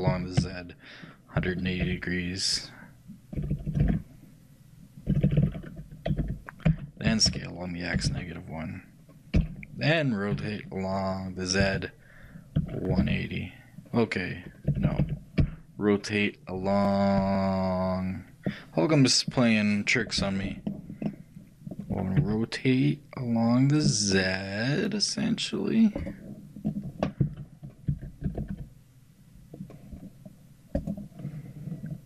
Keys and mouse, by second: 0.2 r, 21.1-32.0 middle drag.